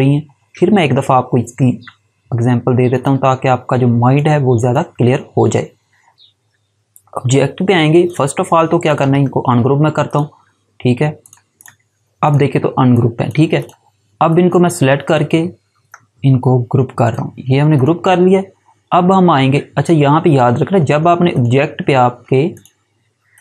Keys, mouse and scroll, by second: 2.8 click, 8.0 click, 9.0 right click, 10.0 click, 15.7 right click, 16.9 click, 21.2 click.